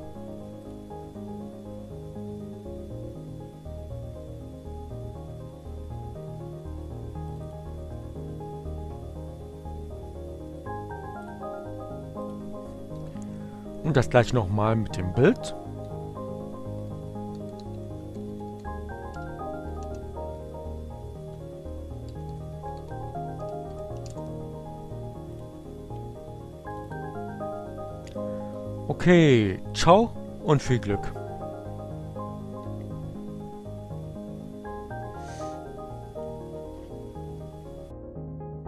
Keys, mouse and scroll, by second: 8.7 click, 13.7 click, 14.7 click, 15.3 Up, 15.6 Left, 17.2 Left, 18.1 Left, 19.3 Delete, 19.5 s, 19.6 Right, 19.7 Delete, 21.0 p, 21.4 g, 21.9 Right, 22.9 Left, 23.1 Delete, 24.3-25.3 typing, 26.1 click, 27.9 click, 30.1-31.2 drag, 35.3-37.4 drag.